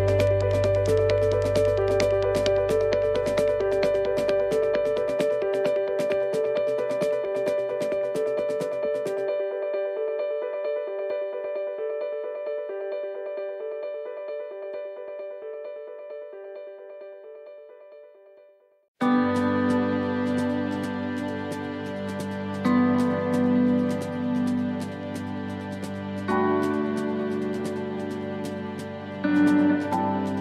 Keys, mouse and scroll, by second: 0.4 scroll down 1, 0.5 s, 4.0 middle click, 4.0 scroll down 3, 4.5 shift+middle click, 5.2 middle click, 5.2 scroll up 3, 6.0 middle click, 6.8 middle click, 7.3 scroll down 1, 7.9 click, 9.8 click, 11.2 middle click, 12.7 s, 18.6 middle click, 18.6 click, 22.2 click, 26.1 click, 26.1 s, 28.5 middle click, 28.5-29.0 scroll up 3, 28.9 middle click, 30.3 click.